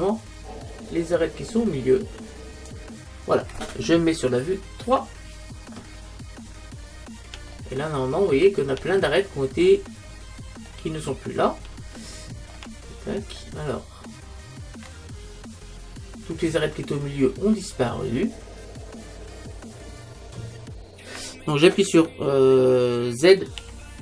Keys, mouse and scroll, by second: 4.8 KP_3, 6.4-10.6 middle drag, 10.7-14.5 middle drag, 23.6 z.